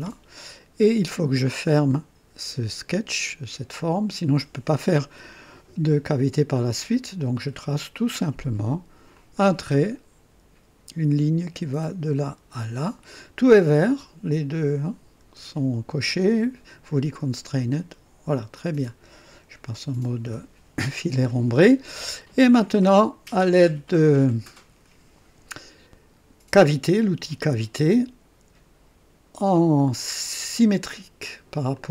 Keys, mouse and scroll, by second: 7.3 click, 9.1 click, 12.1 click, 17.5 click, 18.5-19.2 drag, 20.2 &, 21.2-22.8 drag, 26.5 click, 30.0 click, 31.7-31.9 drag.